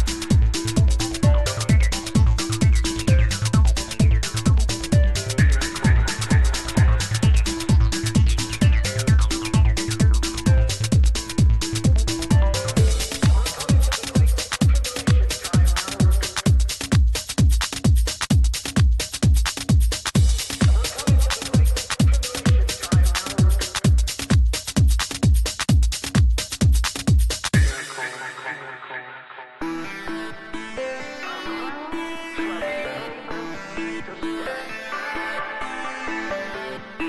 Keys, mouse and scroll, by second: 1.5 e, 2.4 e, 3.3 e, 4.2 e, 5.3 e, 6.2 e, 7.0 e, 8.7 e, 9.7 e, 10.8 e, 11.9 e, 13.3-18.7 typing, 20.0 e, 21.6 e, 25.9-27.8 right drag, 27.3 e, 28.2 e, 29.0 e, 29.9 e, 36.9-37.0 right drag.